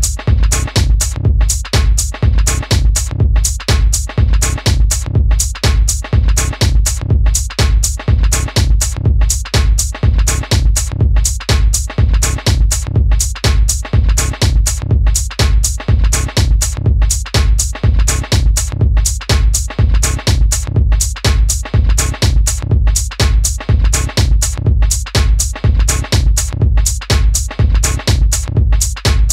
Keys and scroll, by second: 9.6 super+d, 13.2-13.6 typing, 15.9 typing, 18.7 typing, 21.0-21.6 typing.